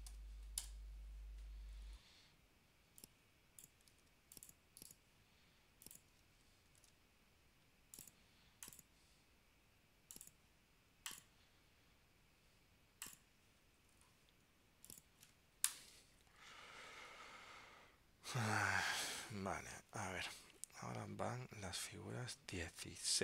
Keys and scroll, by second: 4.1 super+x, 6.9 super+v, 19.8 super+Tab.